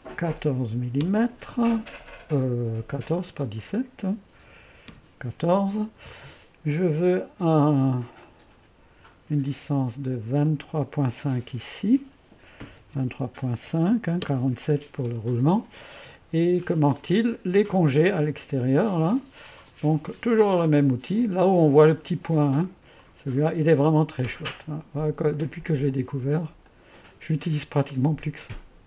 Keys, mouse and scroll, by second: 0.6 KP_1, 0.7 KP_7, 1.0 Return, 3.4-4.4 drag, 4.4-5.2 typing, 8.2-9.3 drag, 10.5-12.7 drag, 12.7 KP_2, 12.9 KP_3, 13.2 KP_Decimal, 13.5 KP_5, 14.2 Return, 16.6 click, 19.0 click, 23.0 click, 25.3-26.0 typing, 25.3 click, 26.7 click, 27.9 click.